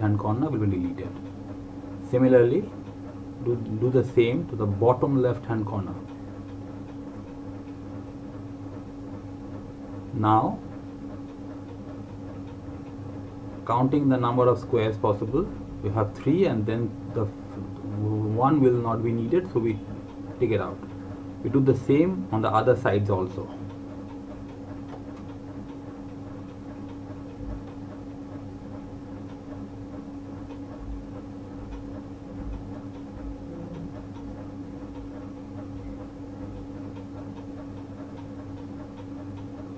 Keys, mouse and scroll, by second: 5.2 alt+Num_Lock, 5.5 alt+click, 18.1 click, 28.6 alt+Num_Lock, 28.7 click, 35.5 alt+Num_Lock.